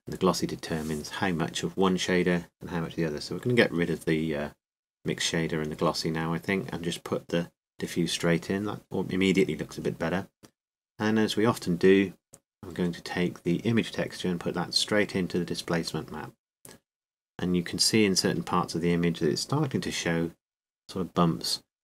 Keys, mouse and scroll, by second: 3.6 Delete, 4.5-5.9 drag, 5.9 x, 7.1-8.2 drag.